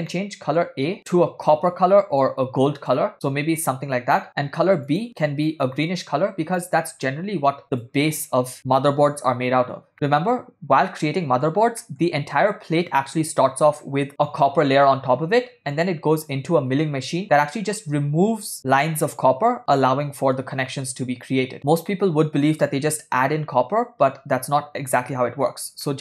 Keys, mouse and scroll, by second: 0.1 ctrl+middle click, 1.0 click, 4.9 click, 9.9-11.5 middle drag, 11.8 ctrl+middle click, 22.0-22.7 middle drag, 25.9-26.0 shift+middle drag.